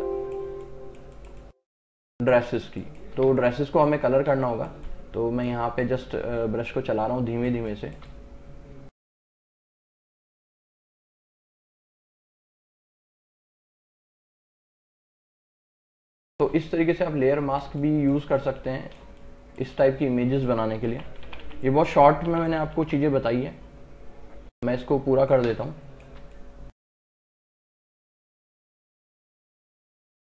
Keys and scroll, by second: 7.6 space, 16.0 space, 21.0 [, 25.6 space.